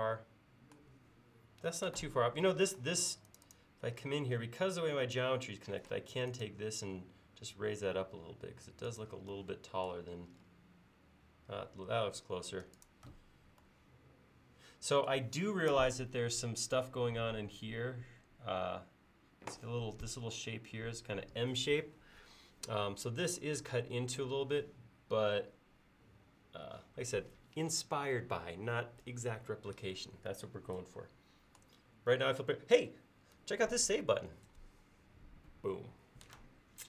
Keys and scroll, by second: 5.9 m, 12.6 space, 34.6 ctrl+s.